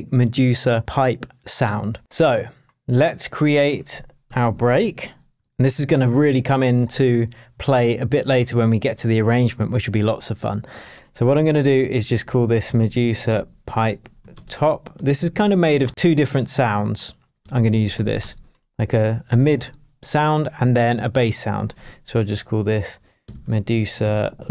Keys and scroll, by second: 4.4 shift+super+m, 5.4 shift+super+Tab, 6.2 shift+super+Tab, 6.4 shift+super+r, 9.6 shift+super+t, 11.4 super+r, 12.1 shift+super+m, 12.2-15.8 typing, 15.9 super+r, 17.2 Delete, 18.2 Return, 20.6 shift+super+t, 21.7 shift+super+r, 22.1 shift+super+r, 23.0-24.5 typing.